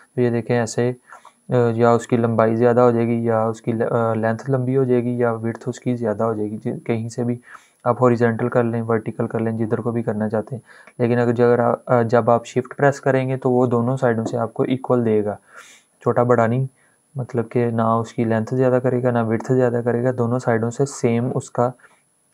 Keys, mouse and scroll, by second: 14.2-15.0 shift+scroll up 2, 15.0-15.7 shift+scroll up 1, 15.7-16.3 shift+scroll up 1, 16.3-17.0 shift+scroll up 1, 17.0-18.4 shift+scroll up 1, 18.4-19.8 shift+scroll down 2, 19.8-20.4 shift+scroll down 1, 20.4-21.1 shift+scroll down 1, 21.1-21.8 shift+scroll down 1, 21.8-22.3 shift+scroll down 1.